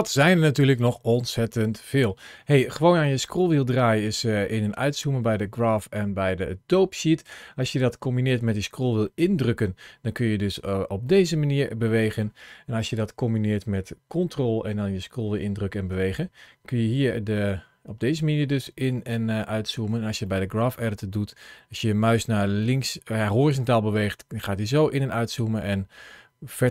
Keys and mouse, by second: 8.9-10.6 middle drag, 11.0-12.1 middle drag, 16.1-19.6 ctrl+middle drag, 20.2-26.7 ctrl+middle drag.